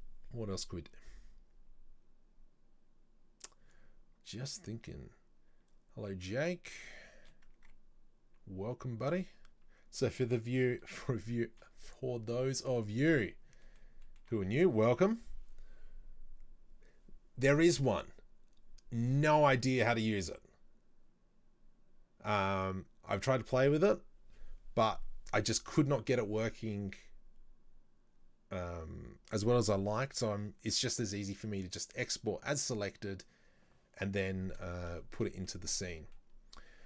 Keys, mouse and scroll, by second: 7.1 shift+middle click, 7.7 Tab, 9.1 alt+right click, 11.5-14.6 shift+middle drag, 14.6-15.0 scroll up 2, 15.0-18.0 shift+middle drag, 35.1-36.8 shift+middle drag, 35.7-36.1 scroll up 1.